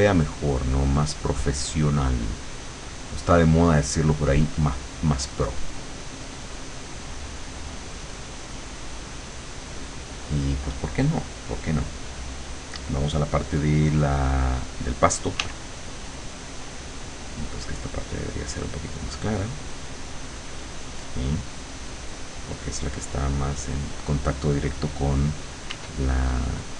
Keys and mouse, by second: 4.6 click, 5.2 click, 6.1 click, 6.6 click, 8.2 click, 8.6 click, 15.4 w, 16.6-19.6 drag, 19.8-22.1 drag, 25.8 w, 26.4-26.7 drag.